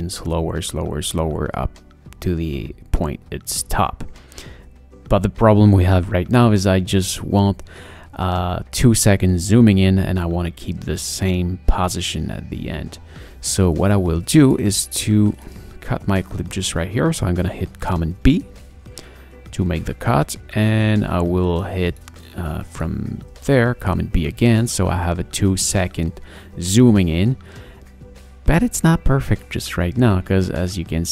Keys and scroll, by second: 8.2 space, 18.1 super+b, 24.2 super+b.